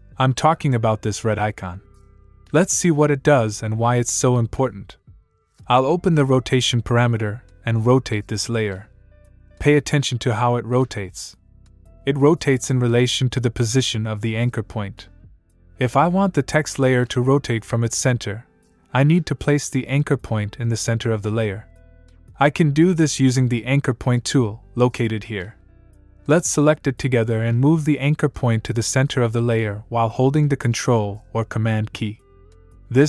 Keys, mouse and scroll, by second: 4.1 super+Num_Lock, 7.8 click, 10.3 click, 13.6 click, 16.2 click, 25.7 click, 29.0 click.